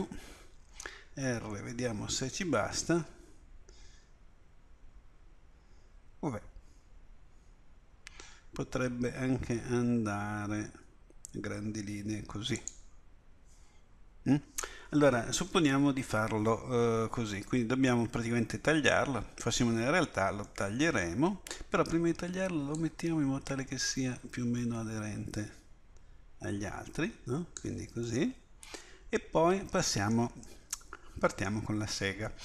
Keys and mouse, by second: 0.6 r, 22.8 click.